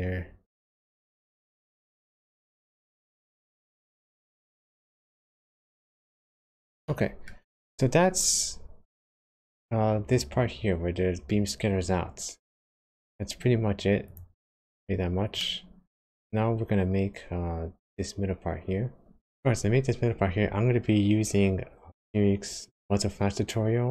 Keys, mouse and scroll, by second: 1.8-3.2 scroll down 6, 3.2-3.9 scroll up 3, 4.2 shift+middle click, 6.0-6.5 scroll down 2, 6.8 shift+middle click, 14.0 click, 14.4-15.0 scroll down 5, 15.0-15.3 scroll up 1, 15.3 middle click.